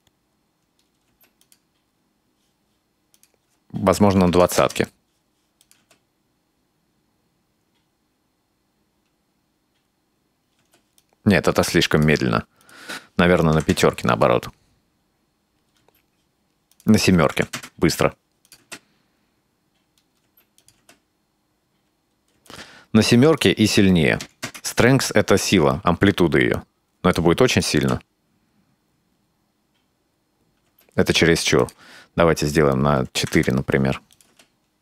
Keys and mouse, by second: 1.1 space, 1.4 click, 3.2-5.2 drag, 5.6 click, 5.8 space, 10.6 space, 11.0-12.1 drag, 12.7-14.5 drag, 14.1 space, 15.8 space, 16.8-18.1 drag, 18.5 click, 18.6 space, 20.3 space, 20.6 click, 20.8 space, 22.4 space, 22.5 click, 23.4-25.1 drag, 26.2-27.2 drag, 27.6 click, 27.8 space, 30.7 space, 31.7-33.8 drag, 34.1 drag, 34.3 space.